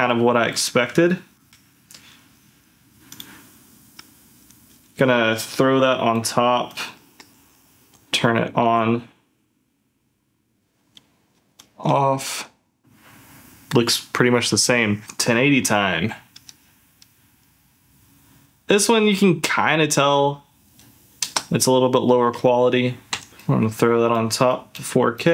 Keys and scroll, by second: 0.2 ctrl+z, 1.1 ctrl+shift+z, 7.3 d, 7.9 ctrl+s, 8.6 ctrl+f, 10.7 ctrl+z, 11.5 ctrl+shift+z, 12.1 ctrl+z, 16.2 ctrl+f, 23.1 ctrl+f.